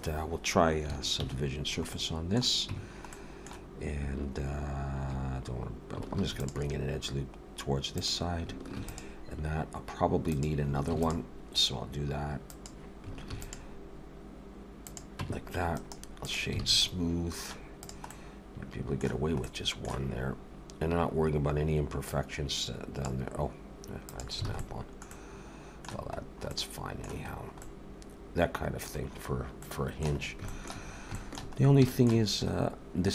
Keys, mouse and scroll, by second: 1.2 ctrl+1, 1.9 middle click, 2.7 Tab, 3.1 middle click, 6.2 ctrl+r, 8.8 ctrl+r, 10.9 ctrl+r, 13.3 ctrl+r, 15.2 Tab, 15.7 right click, 16.6 alt+a, 16.8 middle click, 17.8 click, 18.1 middle click, 19.5 middle click, 22.1 click, 24.1 click, 24.5 alt+a, 24.6 middle click, 25.1 middle click, 26.2-26.5 scroll down 2, 26.5 middle click, 27.3 scroll down 2, 27.6 middle click, 29.0-29.4 scroll down 2, 29.6 middle click, 30.2 scroll up 2, 30.5 shift+middle click, 30.9-31.9 scroll up 4, 31.1 shift+middle click, 31.9 shift+middle click.